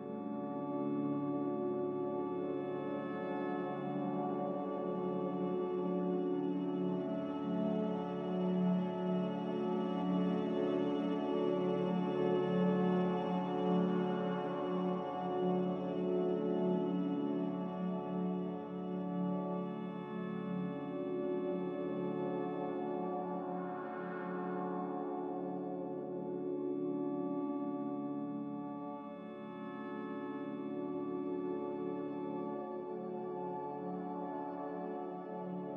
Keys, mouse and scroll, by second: 7.3-8.2 typing, 8.3 Escape, 9.9 a, 13.5-14.4 typing, 15.7-16.5 typing, 16.8 Escape, 17.4 Escape, 20.5 m, 27.1 z, 27.9 b, 31.7-32.5 typing.